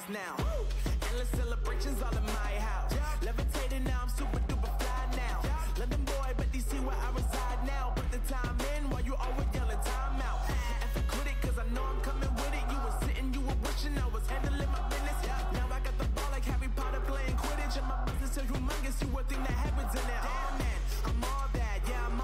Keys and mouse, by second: 0.1 z, 0.5 Tab, 1.0 z, 1.4 z, 3.2 Tab, 4.2 z, 4.9 Tab, 11.8 Tab, 12.6 a, 15.3 n, 17.3-22.2 right drag.